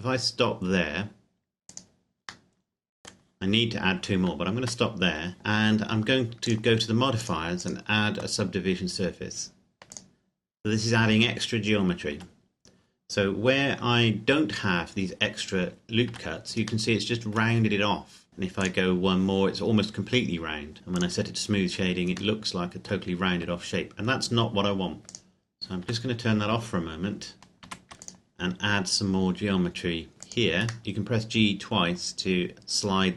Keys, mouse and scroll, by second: 1.8 click, 2.4 middle click, 4.6 Tab, 6.5 click, 9.9 click, 12.1 Tab, 16.1 Tab, 17.0 middle click, 18.6 click, 21.0 click, 25.1 click, 25.8 Tab, 27.6 ctrl+r, 28.0 click, 30.2 click, 30.8 g.